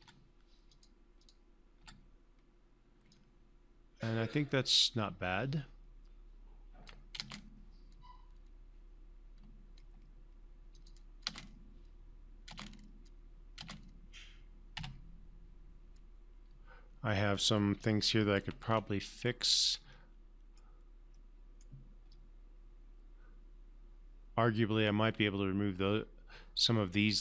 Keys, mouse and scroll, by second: 0.3 3, 1.0 3, 1.0 click, 2.1 3, 3.5-7.5 alt+drag, 7.5 space, 11.1 click, 11.6 space, 15.1 1, 18.1-18.8 alt+click, 19.5 scroll up 1, 19.6-20.0 scroll down 1, 20.3-21.2 alt+middle click, 21.5-22.1 alt+middle click, 22.5-25.3 alt+drag.